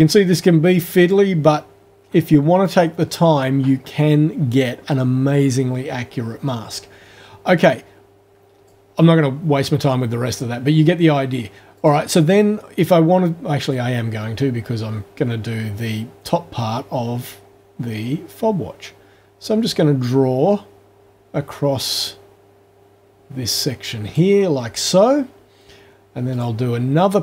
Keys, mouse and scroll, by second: 2.7 click, 7.6-8.9 drag, 11.8 click, 13.7-24.3 drag, 26.3 click.